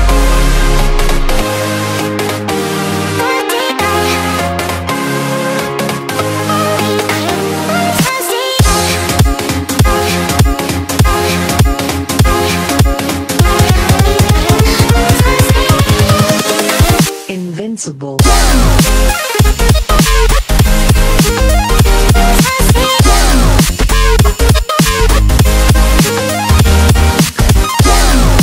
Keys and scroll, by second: 7.8 super+z.